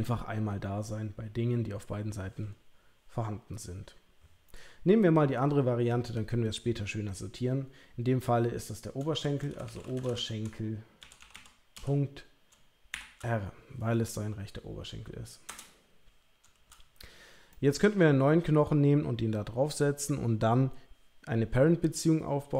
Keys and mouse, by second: 17.5 shift+middle click.